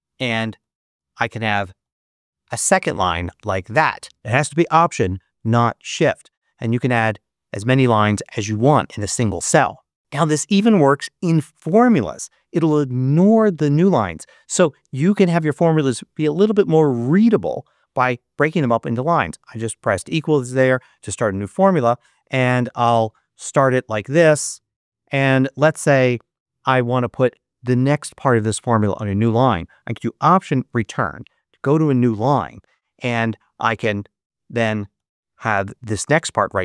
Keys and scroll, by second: 0.1-2.9 typing, 6.8 alt+Return, 9.8 super+a, 10.0 super+BackSpace, 17.3 =, 23.4 shift+=, 25.7 shift+=, 30.3 alt+Return, 34.8 shift+8.